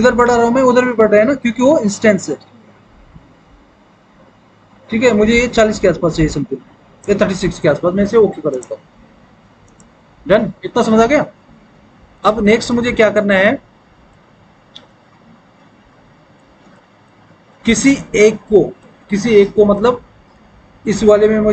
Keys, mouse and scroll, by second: 8.6 click.